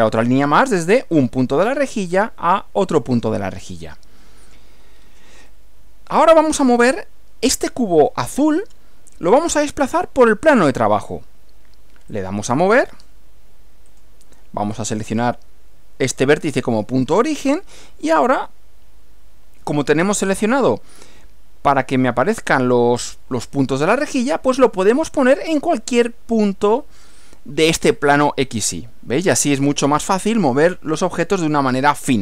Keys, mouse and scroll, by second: 1.4 click, 3.2 click, 4.4 click, 5.0 scroll down 1, 5.5-6.9 middle drag, 6.9 scroll up 1, 7.9-8.9 middle drag, 12.1 click, 13.9 click, 17.1 click, 29.3-30.3 middle drag.